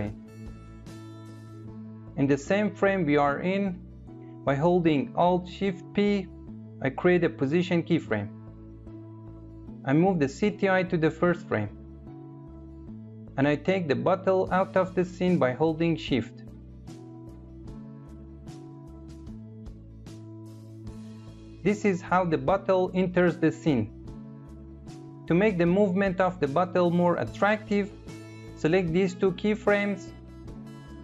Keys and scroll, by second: 4.9 shift+p.